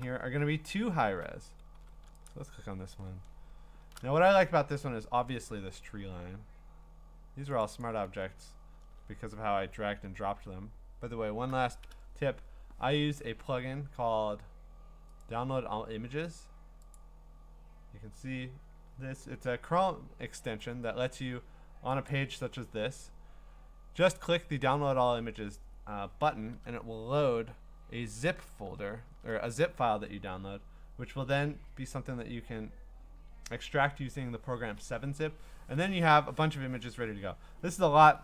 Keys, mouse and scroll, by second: 0.4 v, 0.9-1.7 ctrl+scroll, 1.7 v, 2.3 ctrl+click, 3.1-3.6 scroll, 7.6 click, 7.8 click, 10.3 alt+Tab, 15.2 right click, 17.0 click, 22.1 click, 26.4 click, 26.5 alt+Tab, 28.3 alt+Tab, 28.6 alt+Tab, 29.1 alt+Tab, 31.4 middle click, 31.5 middle click, 31.5 middle click, 31.7 middle click, 31.8 middle click, 31.8-32.6 scroll.